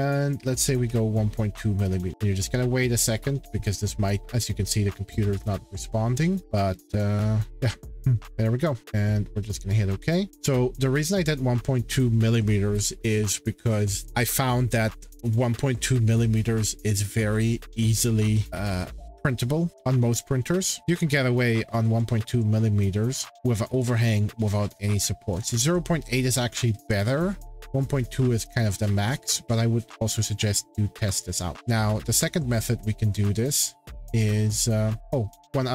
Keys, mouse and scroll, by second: 0.2-1.4 typing, 9.5 click, 11.4-13.9 drag, 20.8-21.2 scroll down 8, 22.0-22.4 scroll down 4, 24.4 scroll up 5, 24.6-25.5 scroll, 26.8 shift+middle click, 27.0-27.5 scroll, 28.8 shift+scroll, 30.3-30.9 scroll, 31.5 shift+middle click, 31.5 scroll, 33.1 shift+scroll, 34.2 click.